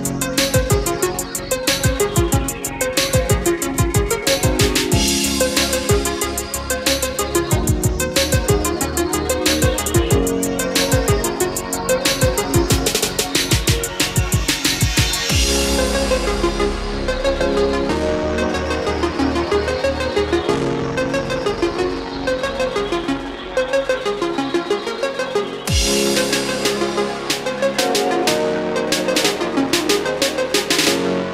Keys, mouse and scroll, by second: 8.4-10.7 middle drag, 10.7 click, 11.1-15.6 middle drag, 15.7 ctrl+click, 20.3 KP_5, 25.8-27.0 drag, 30.6-31.3 middle drag.